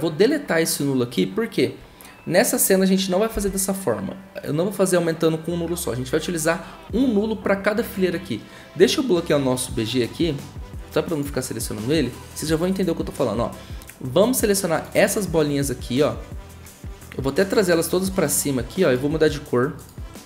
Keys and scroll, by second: 3.3 Delete.